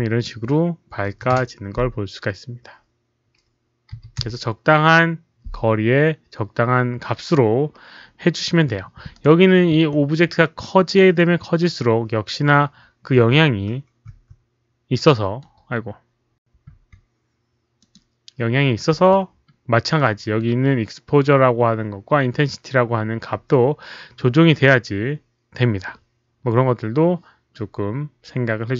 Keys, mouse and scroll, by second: 0.6 Return, 0.6 click, 0.6-1.6 typing, 1.3 Return, 1.6 Return, 1.6 click, 3.9 KP_3, 4.1 Return, 9.1 right click, 9.1 Return, 9.1-9.6 typing, 9.6 Return, 10.5 middle click, 11.6 middle click, 12.0-14.5 typing, 12.1 Return, 12.1 right click, 12.3 Return, 12.3 middle click, 12.3 right click, 14.0 middle click, 14.0 right click, 14.5 Return, 14.5 right click, 14.9 middle click, 16.0-16.7 typing, 16.1 middle click, 16.2 right click, 17.7 click, 18.9 r, 20.0 middle click, 23.8-24.6 typing, 24.1 middle click, 24.1 click.